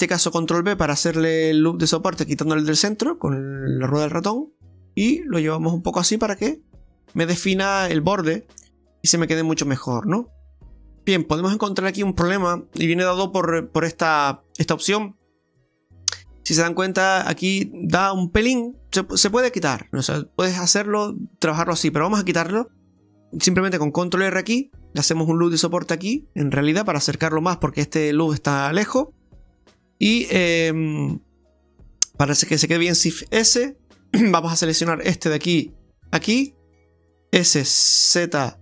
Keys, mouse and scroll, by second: 0.5 ctrl+b, 6.7 click, 7.1 scroll down 2, 7.3 middle click, 8.5 Tab, 8.8 scroll down 1, 9.1 middle click, 10.3 Tab, 10.7 click, 10.9 middle click, 11.4 scroll up 2, 12.5 shift+middle click, 12.7 middle click, 12.7 scroll down 1, 15.4 middle click, 17.8 middle click, 18.6 right click, 19.4 Tab, 19.6 scroll down 2, 19.9 middle click, 22.1 Tab, 24.1 ctrl+r, 26.7 middle click, 29.3 Tab, 30.0 Tab, 30.4-32.0 scroll up 2, 32.0 right click, 33.1 shift+s, 34.9 shift+right click, 36.0 ctrl+shift+right click, 37.6 s.